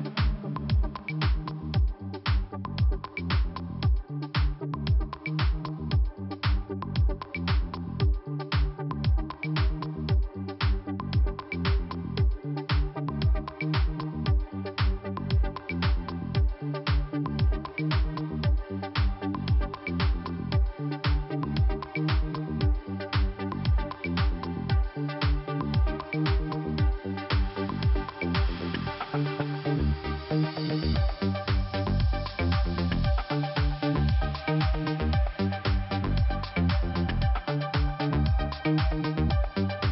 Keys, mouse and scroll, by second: 1.1 click, 1.6 click, 3.2 click, 3.3 click, 4.0 click, 6.3 click, 6.4 click, 6.8 click, 8.2 click, 8.2 click, 8.6 click, 10.3 click, 10.3 click, 10.8 click, 11.8-12.3 scroll down 2, 15.5 click, 18.1 click, 19.6 click, 20.1 right click, 21.2 click, 22.5 click, 26.3 scroll down 1, 28.6 click, 30.5-30.8 scroll up 2, 31.4 click, 32.2 click, 33.6 click, 33.6 click, 34.3 click, 35.5-35.8 scroll down 2, 37.5 click, 38.6 click, 38.7 scroll down 1, 39.7 click.